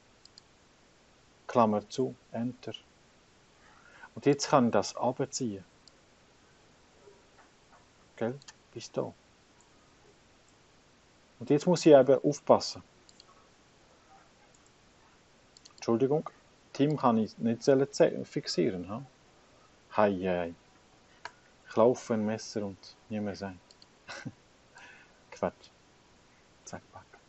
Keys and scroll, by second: 1.7 shift+9, 2.5 Return, 19.1 F4, 19.7 F4, 21.4 Return.